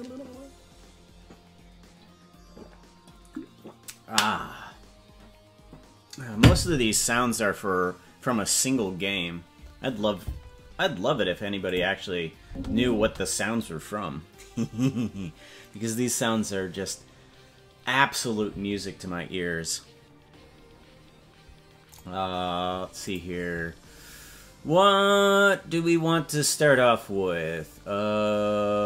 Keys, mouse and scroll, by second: 11.6 click, 12.4 space, 12.9 space.